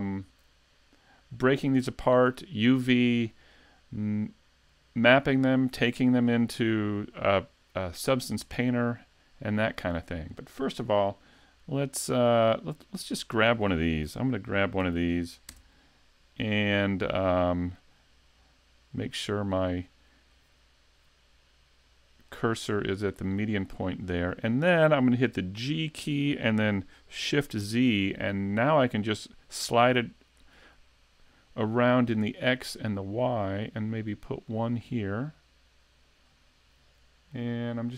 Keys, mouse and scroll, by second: 1.6-2.3 scroll down 1, 2.3-5.4 scroll down 2, 5.5 shift+middle click, 8.4 middle click, 12.8 right click, 13.4 scroll up 2, 13.7 shift+middle click, 14.8 shift+d, 16.8 scroll down 1, 17.8 click, 20.3 middle click, 22.5-22.9 scroll up 3, 22.9 shift+middle click, 23.5 scroll down 1, 23.8 middle click, 25.7 g, 34.9 middle click.